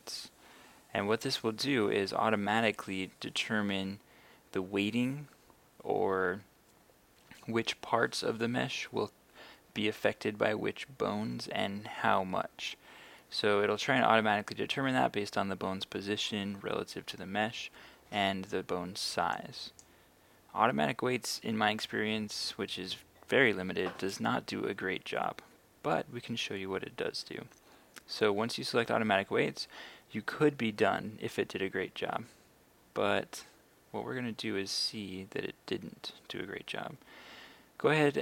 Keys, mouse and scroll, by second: 19.4 click.